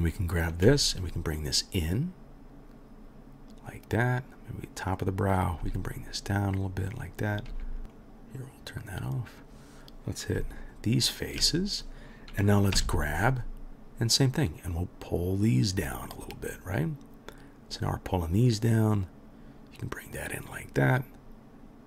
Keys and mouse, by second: 0.6 g, 5.6 g, 7.3 click, 7.3 middle click, 7.5 g, 7.9 middle click, 8.0-21.8 right drag, 10.4 shift+click, 10.4 shift+middle click, 12.7 g.